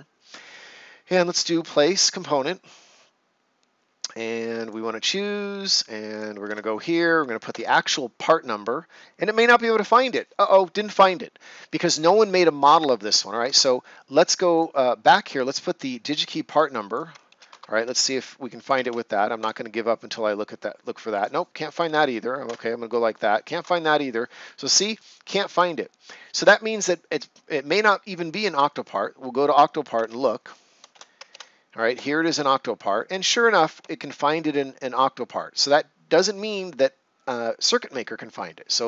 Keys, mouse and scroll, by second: 0.4 right click, 2.3 click, 7.4 Return, 13.4 alt+Return, 13.4 alt+Tab, 14.5 click, 17.2 ctrl+c, 17.4 alt+Tab, 18.4 click, 19.3 Return, 21.1 click, 21.7 BackSpace, 22.4 Return, 23.5 alt+Tab, 24.9 click, 28.4 click, 31.9 Return.